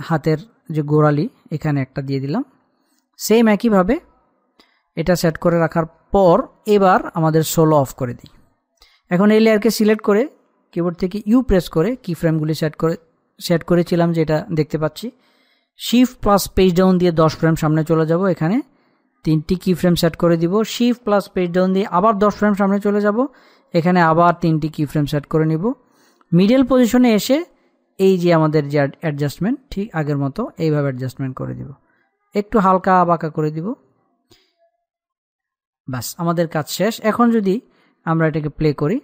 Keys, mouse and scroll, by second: 1.6 click, 8.2 click, 12.0 u, 12.6-13.0 scroll down 1, 14.8 scroll up 1, 16.6 shift+Num_Lock, 16.6-17.3 scroll up 1, 17.3 shift+Page_Down, 19.2 click, 22.2 shift+Page_Down, 24.2 click, 29.2-35.0 drag, 35.0-36.0 scroll down 1, 36.0-37.2 middle drag, 37.2-39.0 drag.